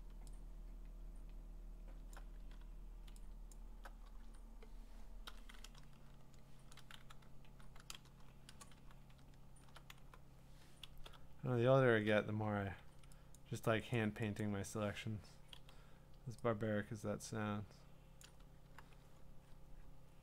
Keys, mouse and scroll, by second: 2.1 alt+click, 2.4 Caps_Lock, 3.5 alt+click, 5.5-6.9 drag, 5.8 z, 7.0-8.9 typing, 9.0-9.4 scroll up 6, 9.4 middle click, 9.6 middle click, 9.6 middle click, 9.9-12.9 typing, 11.1 scroll, 13.4 click, 13.9 click, 14.4 click, 15.5 x, 18.2 click, 18.6 q, 18.8-19.2 scroll, 19.2-19.9 scroll down 16, 20.1 scroll up 6.